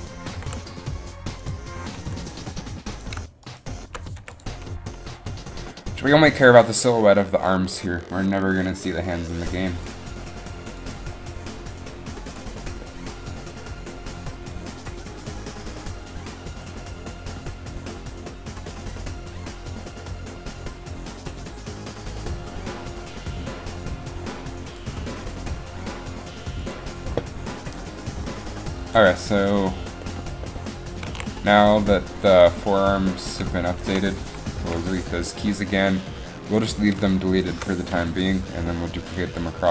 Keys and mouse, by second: 0.4 g, 2.1 r, 3.7 right click, 4.3 i, 9.2 i, 31.2 a, 32.3 i, 34.3 End, 34.7 Delete, 35.0 End, 35.0 Delete, 38.0 Delete, 38.2 End, 38.2 Delete, 38.4 Delete.